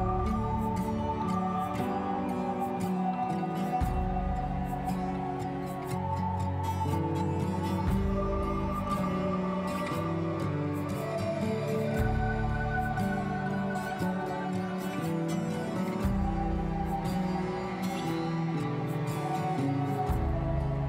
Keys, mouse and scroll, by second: 0.0 ctrl+shift+t, 1.2-1.8 scroll down 8, 1.8-3.0 scroll up 1, 3.0-4.1 scroll down 4, 4.1 click, 5.8 scroll down 1, 6.1-6.6 middle drag, 6.6 click, 9.6-11.0 scroll down 28, 11.0-12.5 drag, 12.5 scroll down 1, 12.7-13.7 middle drag, 13.7-14.0 scroll up 10, 14.3 click, 14.6-16.3 drag, 18.2-19.0 scroll down 10, 19.0-20.1 middle drag, 20.1 a.